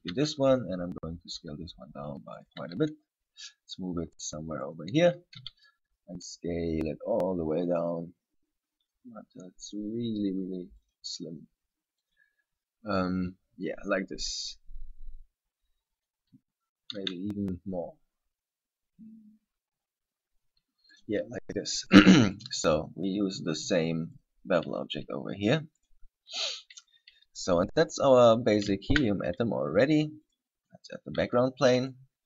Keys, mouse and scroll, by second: 0.3 s, 2.7 click, 2.8 g, 4.9 click, 5.6 s, 11.2 click, 12.2 click, 17.2 s, 21.2 click, 22.4 right click, 24.4 click, 28.0-28.4 scroll down 3, 28.4-29.0 scroll up 1, 29.0-29.6 scroll up 1, 29.0 shift+a, 30.8 scroll down 3, 31.4 s, 32.1 right click.